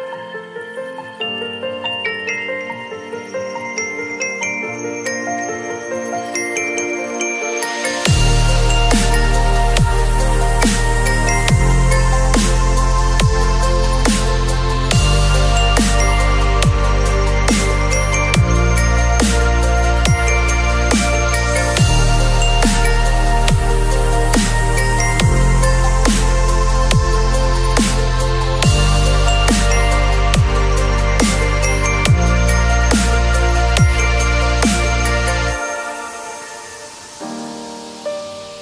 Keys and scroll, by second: 1.1 [, 6.2 [, 11.2 [, 21.8 x, 24.6 x, 26.8 ], 34.2 space, 34.9 x.